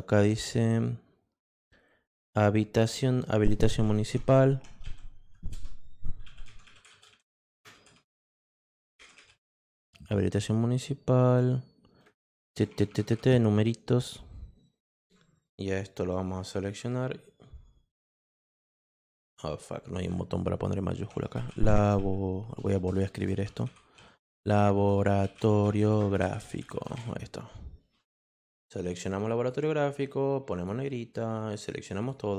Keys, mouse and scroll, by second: 3.4-9.9 typing, 12.0-13.9 typing, 16.1 click, 21.1-27.4 typing, 28.9 click, 30.6 click, 31.6 click.